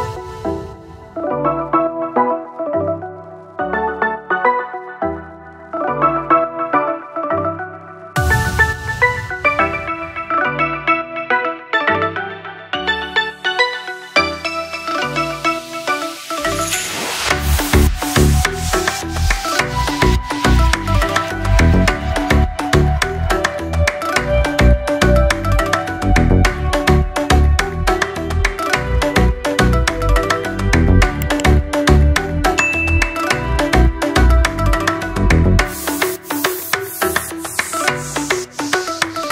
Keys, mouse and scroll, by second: 0.5 ctrl+-, 3.3 click, 4.6 b, 6.8-10.0 typing, 10.3-11.6 drag, 11.6 ctrl+z, 12.6 x, 13.0-20.6 drag, 22.2 typing, 23.0-36.1 drag, 36.1 ctrl+0, 38.7 click.